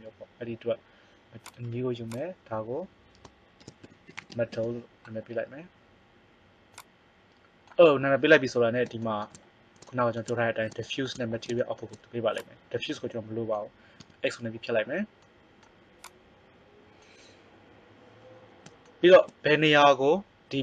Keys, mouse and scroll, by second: 1.4-5.0 drag, 6.7 click, 7.1-8.7 drag, 12.0-13.1 right drag, 13.1 click, 13.5-15.9 right drag, 13.9 x.